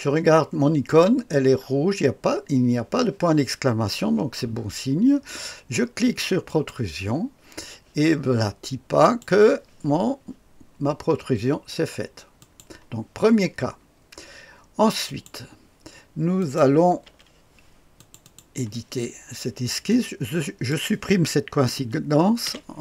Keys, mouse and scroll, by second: 0.9 click, 6.4 click, 9.0 click, 12.4 click, 15.0 click, 16.4 click, 17.0 Delete, 17.9 click, 19.9-20.7 drag, 22.4 Delete.